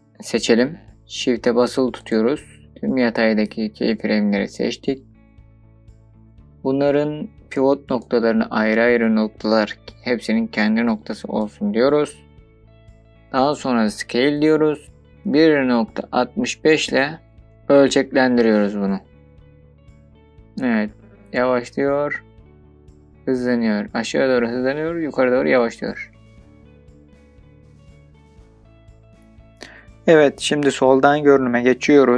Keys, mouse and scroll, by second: 16.3 KP_Decimal, 16.7 KP_5, 17.5 BackSpace, 19.8 KP_Enter, 20.2-24.1 drag.